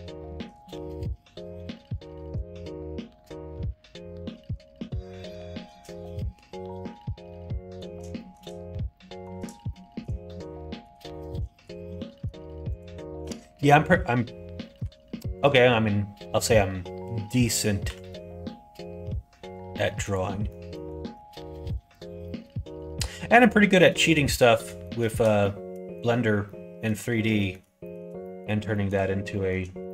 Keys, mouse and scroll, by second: 0.1 shift+middle click, 0.5 middle click, 1.9 shift+click, 3.0 f, 4.4 middle click, 5.0 middle click, 5.4 shift+middle click, 6.1-7.7 middle drag, 8.1 shift+middle click, 8.9 middle click, 9.7 middle click, 10.2 shift+middle click, 11.0 middle click, 11.8 middle click, 12.6 click, 13.2 middle click, 14.8 1, 15.3 click, 17.8 g, 20.4 middle click, 21.0 ctrl+z, 21.8 click, 22.2 middle click, 24.6 middle click, 25.3 middle click, 26.4 middle click, 27.3 middle click, 27.8 shift+middle click, 28.2 middle click, 28.6 shift+middle click, 29.3 middle click, 29.8 shift+middle click.